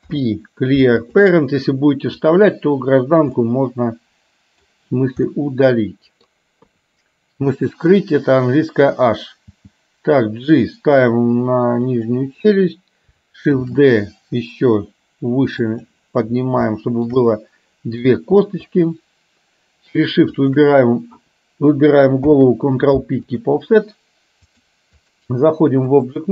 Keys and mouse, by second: 0.0 alt+p, 3.5-4.8 middle drag, 5.4-6.4 middle drag, 6.7 KP_3, 9.7 g, 13.7 shift+d, 16.8 shift+middle click, 17.4 middle click, 18.8 shift+click, 20.4 shift+click, 22.3 ctrl+p, 24.5 click, 26.0 click.